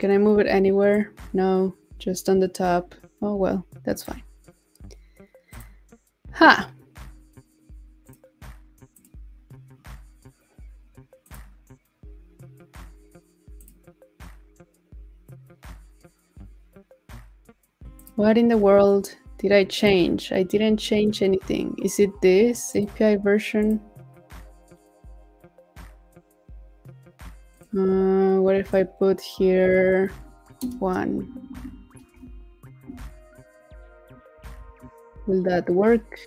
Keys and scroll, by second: 34.3 super+s.